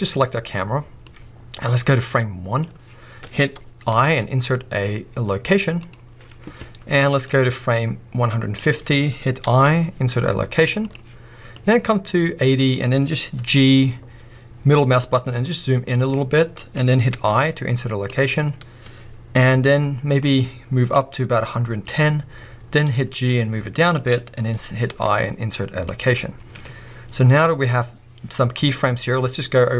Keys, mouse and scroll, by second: 7.3 click, 11.6 click, 13.6-16.7 drag, 13.6 g, 21.0-24.1 drag, 22.6 g.